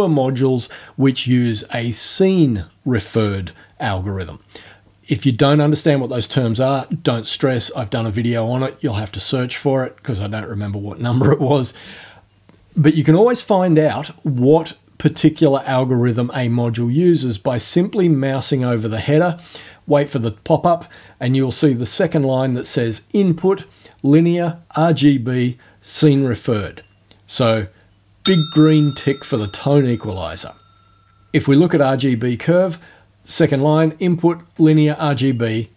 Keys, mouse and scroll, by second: 14.3 click.